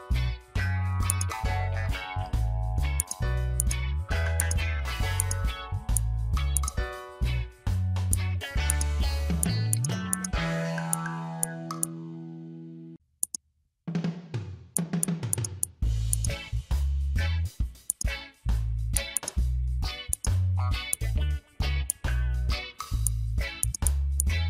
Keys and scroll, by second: 4.1 space, 7.7 ctrl+z, 11.8 space, 13.9 ctrl+z, 14.3 ctrl+z, 21.8 space.